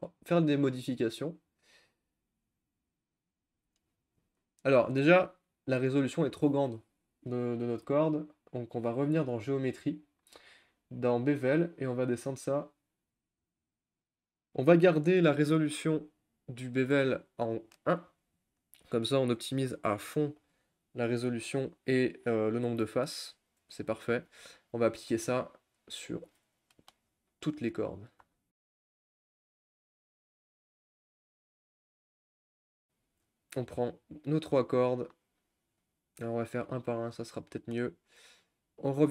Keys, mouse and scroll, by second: 3.3-3.8 drag, 3.8-4.2 shift+middle drag, 4.2-4.7 scroll up 2, 5.0-5.5 scroll down 1, 5.5-5.8 middle drag, 5.8-9.4 scroll up 1, 12.3-16.2 drag, 16.2-21.2 middle drag, 21.2 scroll down 1, 21.5-22.8 scroll up 2, 22.8 scroll down 4, 23.1-23.6 scroll up 2, 23.6-23.9 scroll down 1, 23.9-25.1 shift+middle drag, 25.1 Tab, 26.2 Tab, 26.7-27.1 shift+middle drag, 27.1-27.9 scroll down 1, 27.9 click, 28.4 shift+middle click, 28.6 scroll down 3, 29.0 click, 29.1 ctrl+z, 29.2 shift+middle click, 29.3-30.3 scroll up 3, 29.4 click, 29.8 shift+middle click, 30.1 shift+middle click, 30.3 click, 30.9 scroll down 3, 30.9 shift+middle click, 31.4 Tab, 31.5-32.0 scroll up 4, 31.8 click, 31.9 shift+middle click, 32.0 middle click, 32.4 click, 32.6 shift+middle click, 33.0 Tab, 33.7 click, 34.3-35.9 shift+middle drag, 35.9 shift+click, 37.1 click, 37.5-38.0 shift+middle drag, 38.0-39.1 scroll up 1.